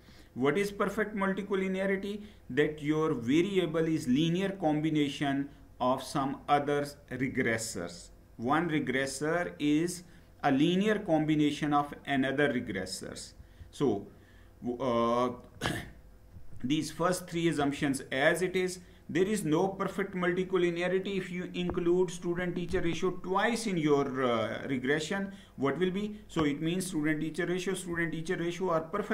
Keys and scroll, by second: 13.1 Down, 16.1 Down, 17.3 Down.